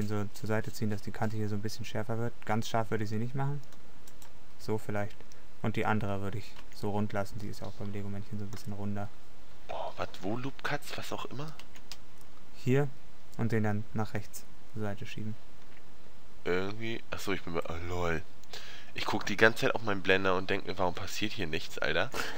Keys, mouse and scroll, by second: 4.4-5.5 middle drag, 6.8 Tab, 11.8 Tab, 14.6 click, 15.2 middle click, 20.4 middle click, 21.8 middle click.